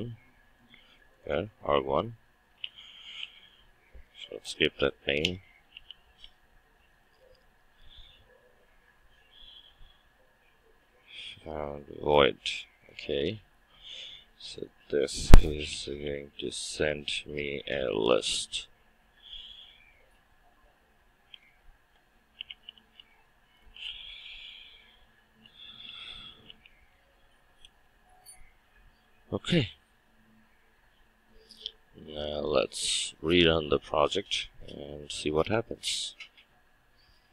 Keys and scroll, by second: 20.2 Return, 32.6 shift+F9.